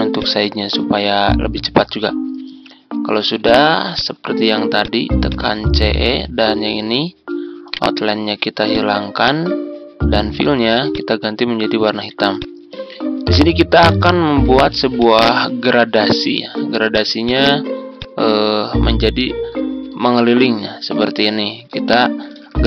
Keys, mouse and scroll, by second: 7.6 right click, 8.6 click, 11.9 z, 12.3 click, 14.1-14.9 ctrl+scroll down 1, 14.9-19.0 drag, 21.7 ctrl+z, 22.3 ctrl+z.